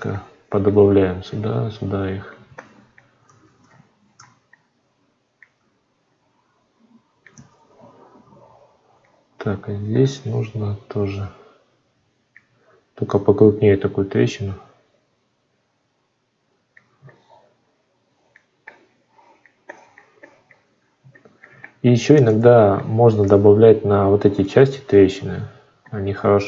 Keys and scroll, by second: 3.1 ctrl+z, 7.2 ctrl+z.